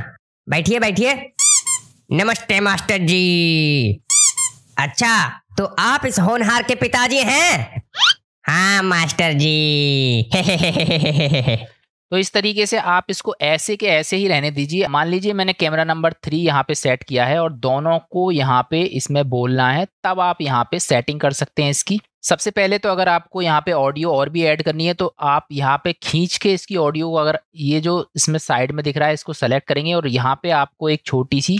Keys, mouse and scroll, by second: 11.8 space, 15.6 click, 21.3 middle click, 22.0 click, 24.9 click.